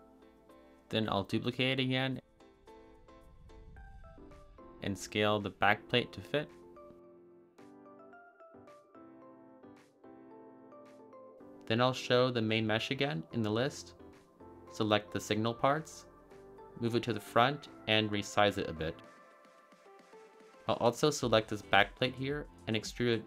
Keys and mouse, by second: 0.4 shift+d, 0.7 click, 0.9 g, 1.1 z, 2.6 click, 4.0 click, 4.7 s, 5.0 z, 5.5 click, 5.7 g, 5.8 y, 6.3 click, 6.6 ctrl+z, 6.9 g, 8.0 click, 9.1 a, 9.2 a, 9.5-11.0 middle drag, 12.8 click, 14.5 click, 15.1 shift+click, 15.9 g, 16.3 y, 16.9 drag, 17.0 middle drag, 17.7-19.1 typing, 18.1 click, 18.3 shift+middle click, 19.0 click, 19.8 drag, 19.9-20.3 middle drag, 20.4 middle click, 21.0 middle click, 21.7 middle click, 22.1 click, 22.6 e.